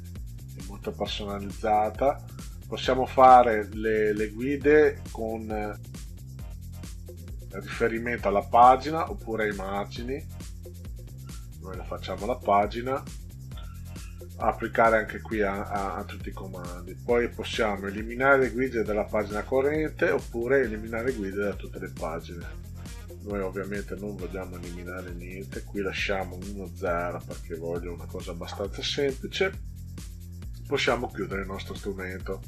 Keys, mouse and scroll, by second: 8.9 click, 11.3 click, 15.9 click, 23.0 click, 24.3 click, 24.5 click, 24.7 click, 24.9 click, 25.1 click, 25.3 click, 25.7 click, 25.9 click, 26.1 click, 26.3 click, 26.6 click, 26.8 click, 26.9 click, 30.5 click.